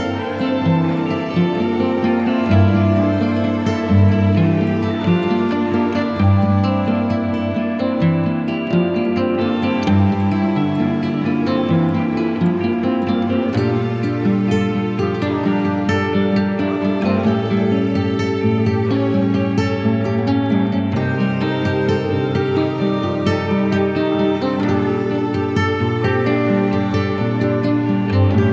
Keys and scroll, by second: 0.0 b, 3.8 ctrl+alt+x, 4.5 alt+x, 6.8 z, 8.3 v, 17.2 b, 24.1 ], 26.3 [.